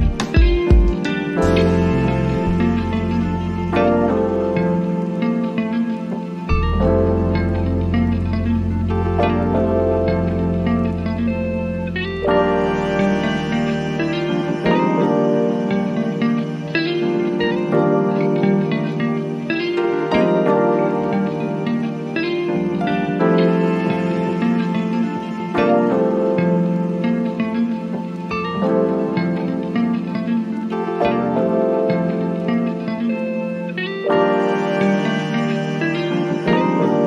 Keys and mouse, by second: 4.6 click, 7.3 click, 10.9-13.4 drag, 13.4-15.8 drag, 17.9-18.6 typing, 18.6-32.3 drag, 35.4 click.